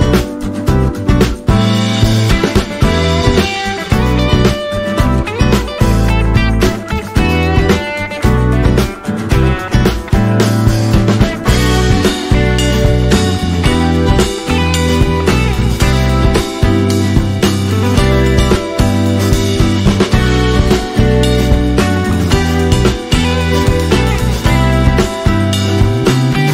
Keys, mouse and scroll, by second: 0.2-3.1 drag, 3.1 space, 3.2 click, 3.4 space, 4.4-7.4 drag, 7.4-11.8 drag, 11.8 Right, 12.5-14.8 drag, 15.8-16.4 alt+scroll up 2, 16.4 click, 16.7 scroll down 2, 18.4 shift+click, 23.2 scroll up 3, 23.4-23.7 alt+scroll down 3, 24.1 space, 24.2 click, 24.4 space, 25.0 click.